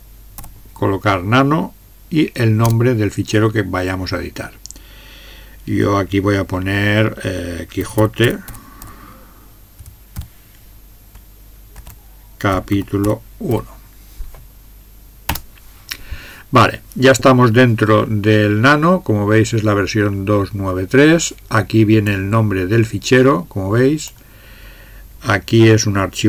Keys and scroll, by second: 0.0-0.4 typing, 2.6 typing, 7.6-9.8 typing, 11.5-14.0 typing, 15.3 Return.